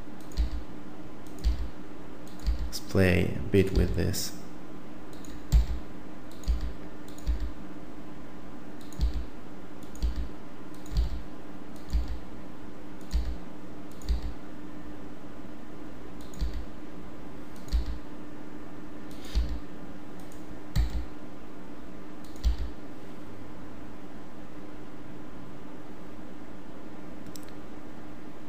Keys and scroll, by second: 0.4 e, 1.4 e, 2.4 e, 3.7 e, 5.6 e, 6.4 e, 7.2 e, 9.0 e, 10.0 e, 11.0 e, 11.9 e, 13.1 e, 14.0 e, 16.4 e, 17.7 e, 19.3 e, 20.8 e, 22.4 e.